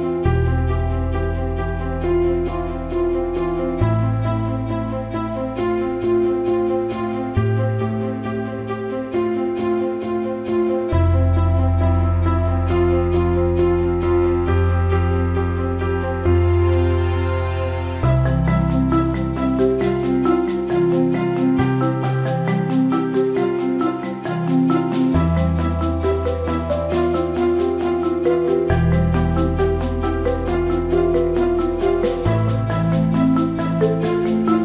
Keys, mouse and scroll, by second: 0.5 alt+middle click, 2.7 click, 3.7-5.7 drag, 6.7 alt+middle click, 6.9 alt+shift+middle drag, 8.4 click, 9.0 alt+middle drag, 9.3 alt+shift+middle drag, 9.7-11.0 drag, 12.3-14.8 shift+drag, 15.5 click, 16.2-17.0 drag, 17.9-18.4 drag, 19.2 click, 21.1 click, 21.6 click, 22.9-24.5 shift+drag, 24.7-25.0 alt+middle drag, 25.1-25.4 drag, 25.5-26.3 alt+middle drag, 27.6 click, 28.0 click, 28.5 click, 29.6 click, 30.1 click, 30.4 click, 31.2 alt+middle click, 33.4 click, 33.8 click, 34.2 click.